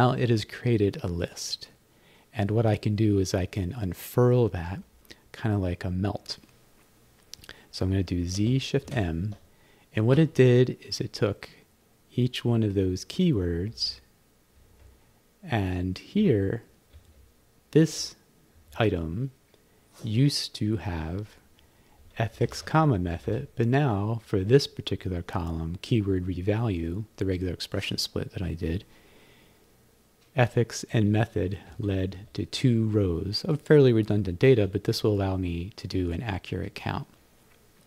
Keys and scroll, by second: 8.4 z, 8.9 shift+m, 13.2 Down, 13.7 Right, 14.7 Right, 16.2 Down, 16.9 Up, 17.8 Down, 18.6 Up, 22.4 Left, 23.1 Right, 30.9 Down, 31.7 Up, 32.2 Down, 34.5 Up.